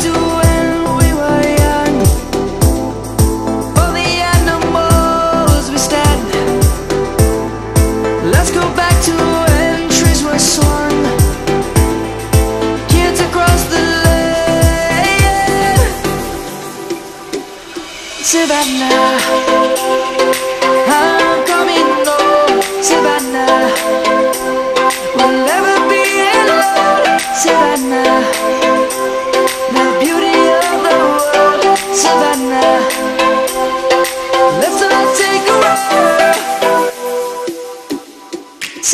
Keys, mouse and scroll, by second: 7.1-9.9 shift+drag, 10.7 Up, 13.1 click, 13.4 space, 13.7 click, 13.8 space, 14.4 click, 14.6-16.4 scroll up 1, 16.4 click, 16.6 space, 16.8-17.1 click, 17.1 space, 17.7 click, 18.2-19.0 alt+drag, 21.4-24.1 drag, 27.1-27.7 shift+drag, 29.5 space, 30.4 click, 31.1 shift+click, 32.8-34.0 alt+drag, 35.7 shift+click, 37.7-38.9 drag.